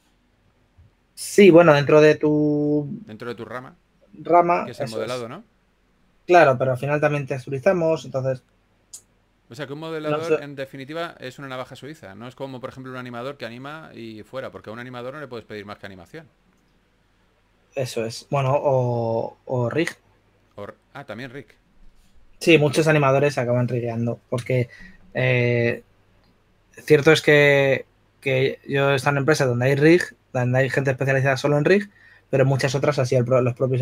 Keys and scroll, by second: 0.0 b.